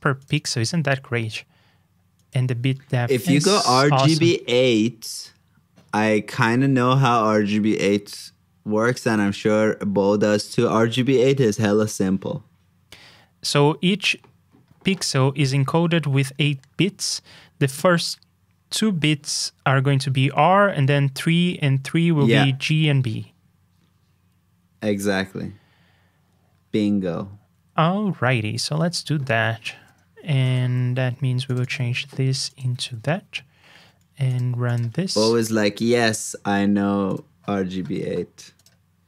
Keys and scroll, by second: 28.2 super+c, 30.4 super+j, 35.0 super+c, 36.1 super+j.